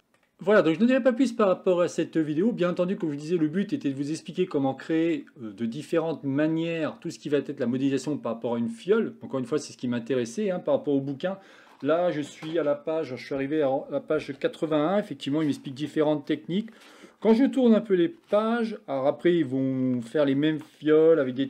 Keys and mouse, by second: 0.0 middle click, 1.0 middle click, 3.8-5.2 middle drag, 6.2-6.7 middle drag, 9.3-10.5 middle drag.